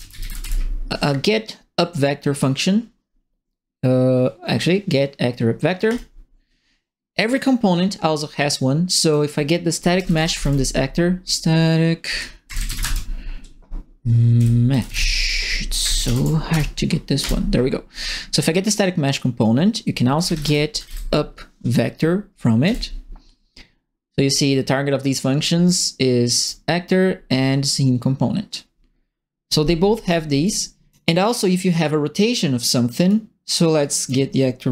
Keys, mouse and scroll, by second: 0.0-0.9 typing, 5.8 click, 6.5 middle click, 7.1 right click, 7.5 middle click, 8.8 click, 9.5-10.9 typing, 12.3-13.2 typing, 14.3 End, 14.4-15.4 typing, 15.8 Home, 16.0 ctrl+Right, 16.5 BackSpace, 17.2 Return, 19.1 click, 19.9-21.3 typing, 22.6 Return, 24.3 middle click, 26.0 ctrl+middle click, 29.0 middle click, 29.3 middle click, 29.9 right click, 30.4 click, 32.9 click, 33.8 click.